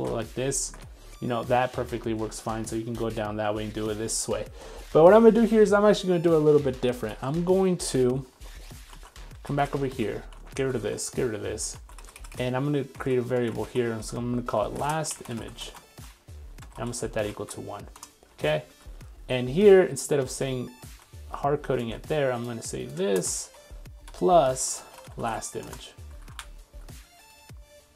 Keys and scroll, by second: 7.1 super+x, 8.9 super+x, 11.8 super+s, 21.0 super+x.